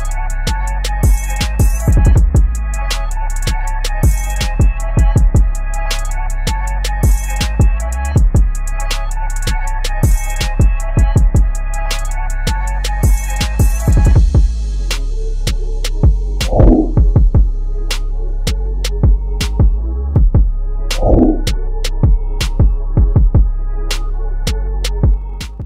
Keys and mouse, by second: 1.0 ctrl+=, 2.4 click, 2.9 ctrl+-.